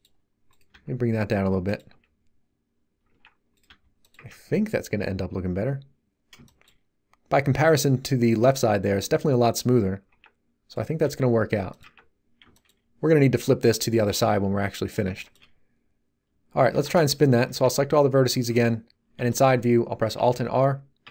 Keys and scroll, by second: 1.9 Tab, 3.6 g, 4.1 Tab, 10.1 Tab, 11.0 g, 11.8 Tab, 16.7 Tab, 17.4 a, 18.5 3, 20.1 alt+r, 21.0 a.